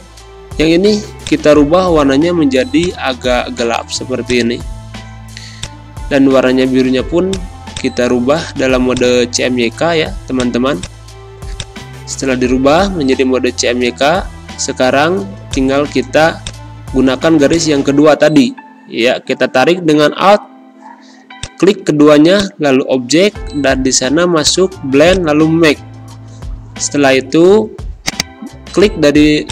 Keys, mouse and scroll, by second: 12.4 ctrl+z, 13.9 ctrl+shift+[, 28.0 click.